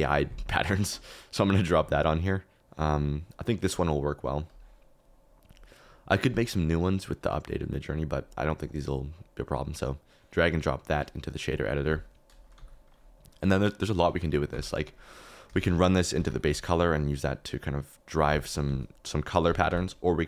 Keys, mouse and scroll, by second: 11.5 click, 12.5 g, 14.5 g, 15.5 shift+a, 19.6 g.